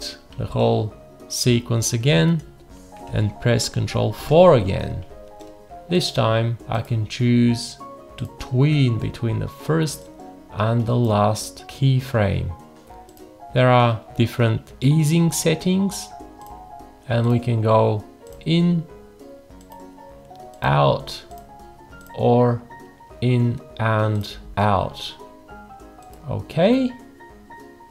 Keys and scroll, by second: 4.2 ctrl+4.